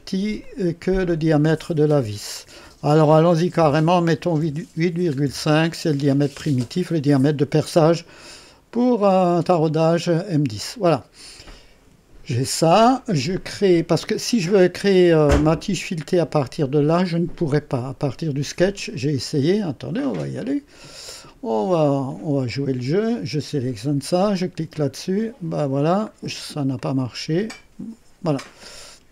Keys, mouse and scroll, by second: 0.4 click, 3.6 KP_8, 4.4 KP_Decimal, 5.2 KP_5, 6.4 KP_Enter, 9.2 click, 10.7 scroll up 1, 11.5 right click, 19.6 click, 22.0 click, 24.7 click, 26.1-26.5 scroll down 2, 26.7-27.8 drag.